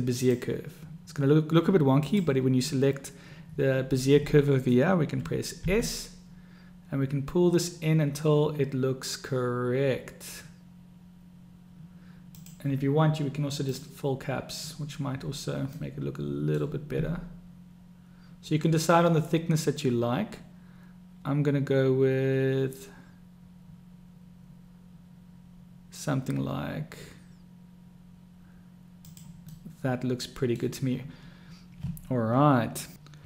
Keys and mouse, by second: 2.3 click, 5.9 s, 13.9 click, 16.1-16.9 drag, 17.3 s, 29.8-31.0 drag.